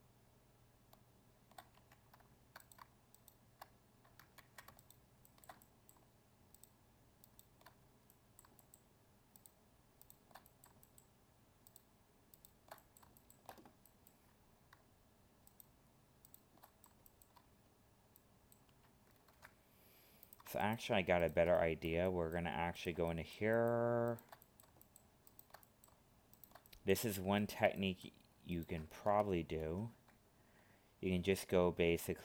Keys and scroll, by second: 4.3 ctrl+z, 19.2 ctrl+Tab, 29.6 ctrl+f.